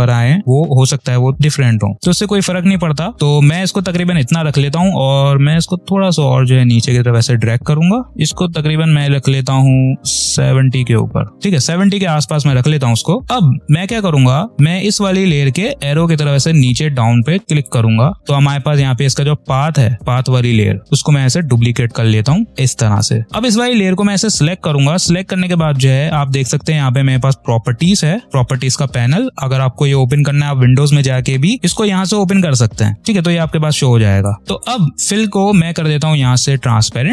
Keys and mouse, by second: 5.8-12.2 drag, 13.2 v, 15.7 click, 20.8-23.2 drag, 26.8 click, 30.0 click, 34.0 click.